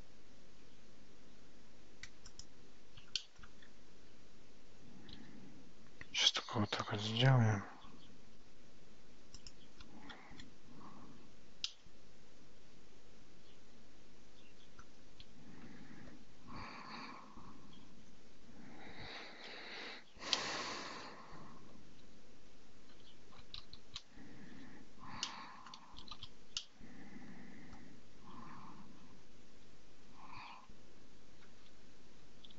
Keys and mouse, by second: 1.3 g, 3.2 shift+middle click, 5.2 g, 11.7-14.9 middle drag, 22.0 ctrl+z, 24.0 ctrl+shift+z, 24.6 Tab, 25.3 middle click, 26.2 shift+z, 26.6-27.8 middle drag.